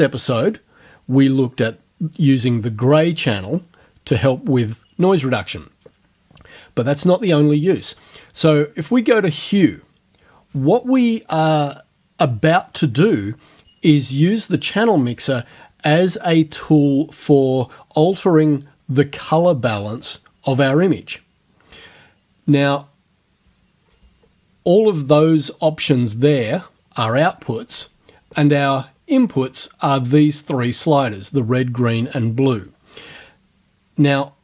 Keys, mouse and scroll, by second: 9.2 click, 25.2 click, 28.7 click.